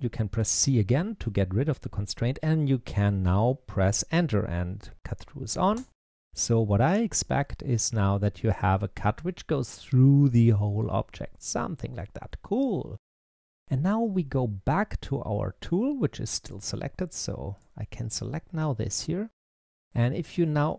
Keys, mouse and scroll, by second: 7.3-10.3 middle drag, 14.6-17.5 drag, 17.8-20.5 middle drag, 20.5 click.